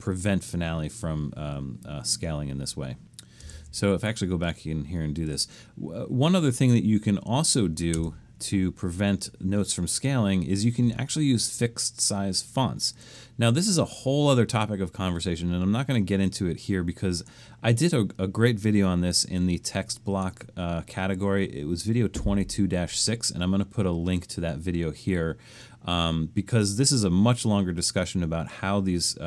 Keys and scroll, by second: 3.5 shift+Return, 8.0 Return.